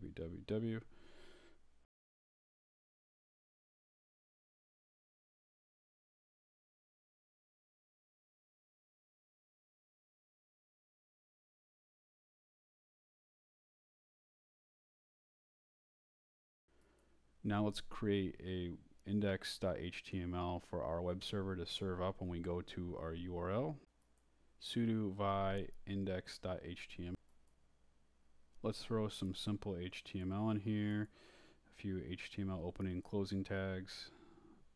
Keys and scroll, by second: 0.7-2.0 typing, 3.8-5.1 typing, 5.4 Return, 6.8-10.4 typing, 11.5-13.2 typing, 14.7 Return, 14.9-16.4 typing, 16.8 Return, 18.9-25.0 typing, 26.6 Return, 28.1-30.3 typing, 31.1 Return, 31.8 shift+Return, 31.9-34.7 typing.